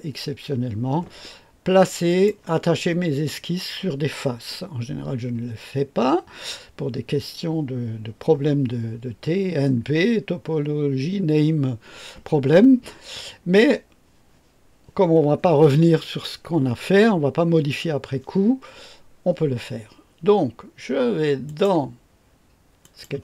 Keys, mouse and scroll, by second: 2.0 click, 21.4 click, 22.8 click.